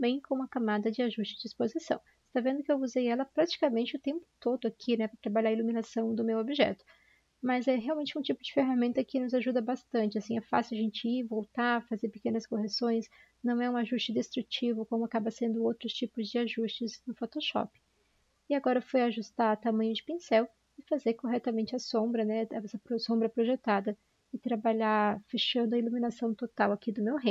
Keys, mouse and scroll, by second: 11.1 typing, 14.2 typing, 16.3 typing.